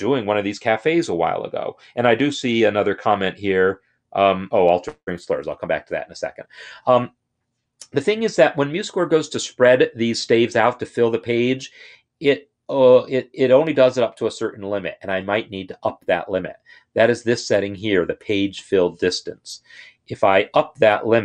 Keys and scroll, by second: 19.7 Up, 20.5 Up, 20.6 Up.